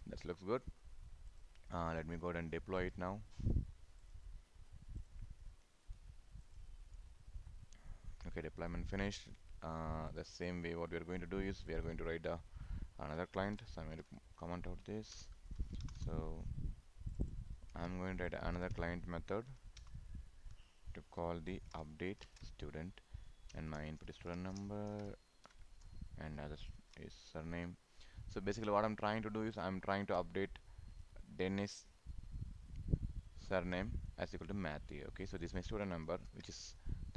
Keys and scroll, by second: 17.7 ctrl+c, 18.8 ctrl+v, 22.3 ctrl+space, 24.1 ctrl+Right, 24.7 ctrl+shift+Right, 26.8 ctrl+s, 36.1 ctrl+c.